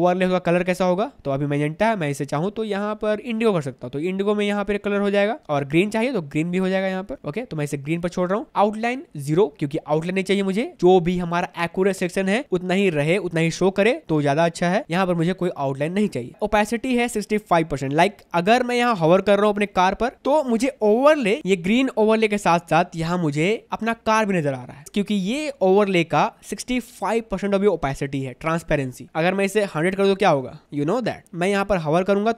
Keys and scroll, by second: 30.8 1.